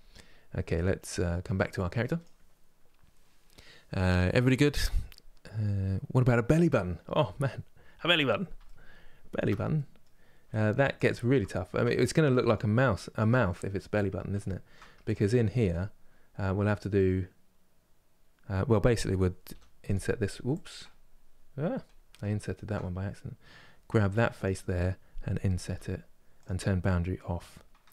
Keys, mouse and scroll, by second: 7.4 scroll down 2, 8.3-10.4 middle drag, 10.4 Tab, 11.1-13.4 shift+middle drag, 13.4-14.1 scroll up 1, 14.1-21.2 shift+middle drag, 21.2-22.1 scroll down 1, 22.1 ctrl+z, 24.1 Left, 25.5 |, 27.1 click, 27.5-27.9 middle drag.